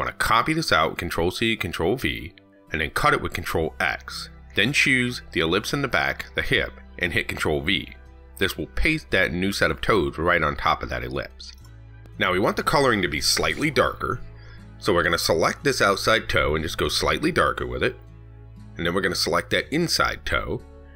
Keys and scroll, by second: 0.1 ctrl+c, 0.4 ctrl+v, 2.2 ctrl+x, 7.1 ctrl+v.